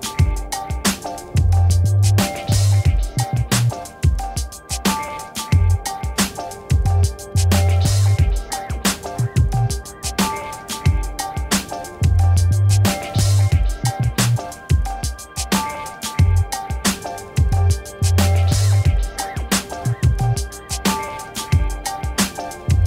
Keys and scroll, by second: 22.4 m.